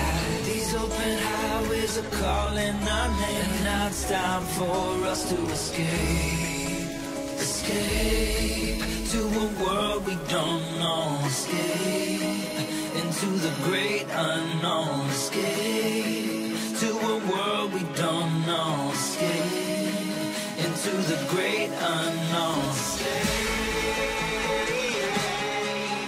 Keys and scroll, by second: 3.8 Return, 4.5 h, 7.5 b, 10.2 9, 11.2 BackSpace, 11.6 8, 12.1 0, 12.4 Return, 13.8 [, 18.3 [, 20.3 ], 24.9 [.